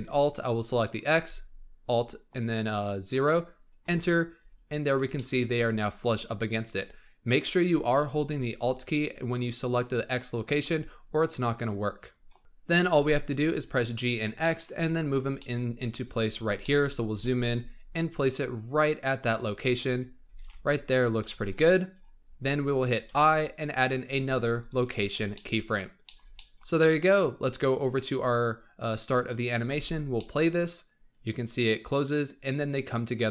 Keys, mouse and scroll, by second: 0.8-3.9 alt+drag, 5.1 shift+middle click, 5.4 scroll up 2, 6.7-9.7 scroll up 3, 11.3-12.1 scroll up 5, 12.1-12.8 scroll down 7, 12.8 g, 14.3 shift+middle click, 14.7-15.1 scroll up 9, 15.3 shift+middle click, 15.7-16.8 scroll up 15, 16.5 shift+middle click, 17.0 g, 19.5-20.2 scroll up 9, 20.2 g, 21.1-23.0 scroll down 25, 23.0 i, 25.2-26.7 shift+middle drag, 26.7 scroll down 4, 27.7-29.6 drag, 29.6 space, 30.1-33.3 middle drag.